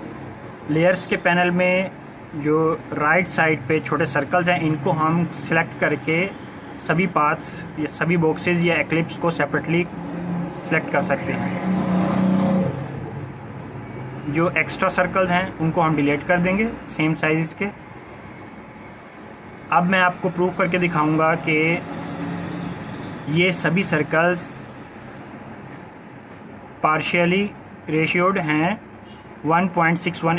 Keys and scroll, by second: 10.7 Delete, 12.0 ctrl+-, 12.2 ctrl+-, 12.2 ctrl+-, 12.4 ctrl+-, 12.6 ctrl+-, 12.8 ctrl+-.